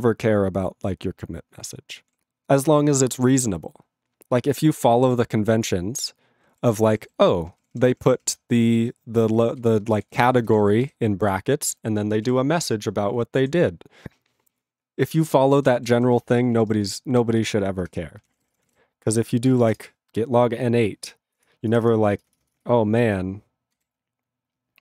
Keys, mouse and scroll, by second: 16.9 q.